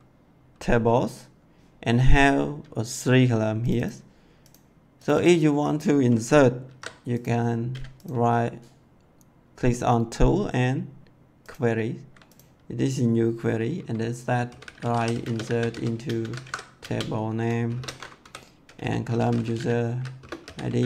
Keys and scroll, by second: 6.6 ctrl+c, 14.1-20.8 typing, 16.3 ctrl+v.